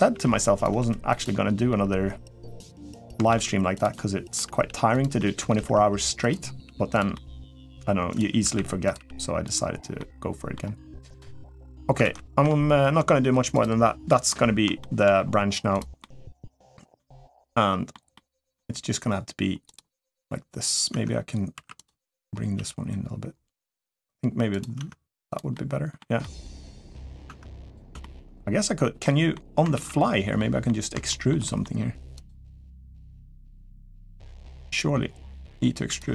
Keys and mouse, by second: 0.5 g, 1.5-2.7 middle drag, 3.1 shift+d, 3.7 middle click, 4.4 g, 4.9 middle click, 6.0 r, 6.4 g, 6.9 middle click, 7.6 g, 8.2 r, 8.7 g, 9.8 middle click, 10.9 click, 11.2 middle click, 11.8 ctrl+s, 12.7 Tab, 13.4 click, 13.9 middle click, 14.6 shift+middle click, 15.8 middle click, 16.9 middle click, 17.9 middle click, 19.4 click, 20.7 Tab, 21.3 3, 21.5 click, 22.3 g, 24.6 Tab, 25.1 click, 25.3 middle click, 26.0-26.8 middle drag, 27.0 Tab, 27.5 click, 27.8 shift+middle click, 28.8 middle click, 29.9 ctrl+s, 30.2 middle click, 30.9 shift+middle click, 31.2 middle click, 31.9 click, 35.2 e, 35.9 s.